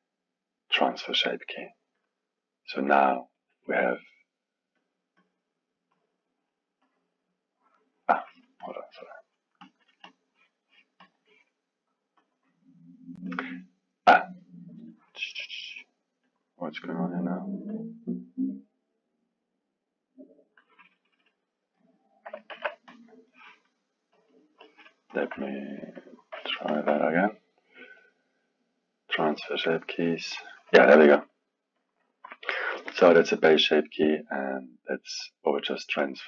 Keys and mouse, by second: 3.4-5.0 drag, 5.9-9.8 drag, 10.0-10.6 drag, 11.0 drag, 12.2 click, 13.3 click, 14.1 click, 14.9-16.4 drag, 17.7 drag, 18.5-21.7 drag, 21.7-22.5 middle drag, 22.5 KP_1, 22.9-25.3 drag, 25.9 drag, 26.7 shift+drag, 28.0-31.8 drag, 34.7 click, 36.0 click.